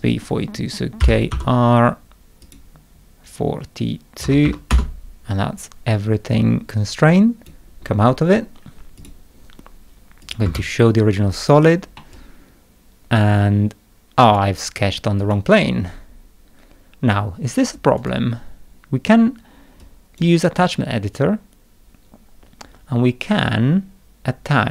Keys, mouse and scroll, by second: 1.0 k, 1.3 r, 2.4 click, 4.0-4.9 typing, 7.1 click, 9.0 click, 10.2 click, 10.4 space, 12.0-14.3 middle drag, 12.1-14.3 drag, 15.2 click, 18.0 right click, 19.8 click.